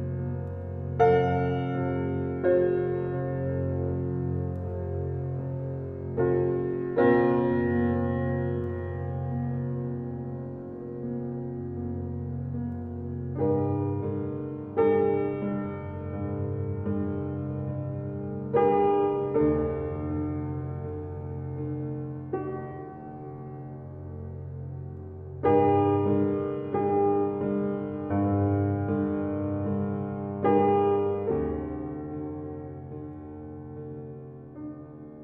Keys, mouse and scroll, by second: 4.0 shift+a, 5.7 g, 7.0 s, 8.2 alt+middle click, 8.7 g, 10.7 alt+middle click, 10.9 alt+middle click, 11.3-11.8 scroll up 11, 11.8 shift+middle drag, 12.1 s, 13.2 g, 14.5 s, 16.0 g, 18.5-18.9 middle drag, 18.9-19.8 scroll up 19, 19.8-20.5 scroll down 28, 20.7-21.1 middle drag, 21.1 scroll up 1, 21.4-23.6 middle drag, 23.6 scroll up 1, 23.9 shift+middle click, 24.6-25.0 scroll up 1, 25.0-26.0 shift+middle drag, 26.0 Tab, 26.2 click, 26.6-27.7 middle drag, 27.7 e, 29.6 g, 32.2-33.2 middle drag, 33.2 e, 34.7 g.